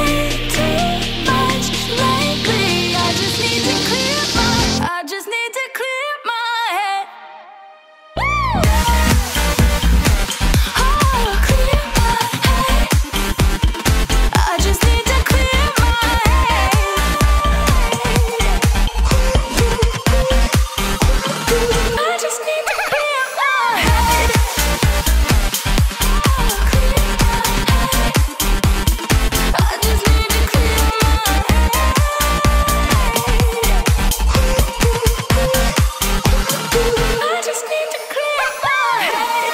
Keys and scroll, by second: 0.3 ctrl+t, 1.3 ctrl+alt+t, 4.6 Return, 5.7 space, 6.3 ctrl+alt+space, 34.8-35.2 typing.